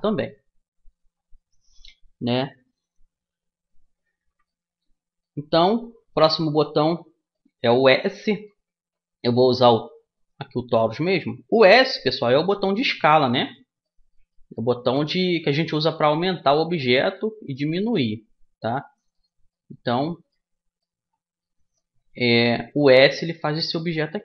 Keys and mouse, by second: 4.2-10.0 middle drag, 10.0-11.8 drag, 11.9 s, 13.5 middle click, 14.9 s, 17.2 s, 18.7 middle click, 22.4 s.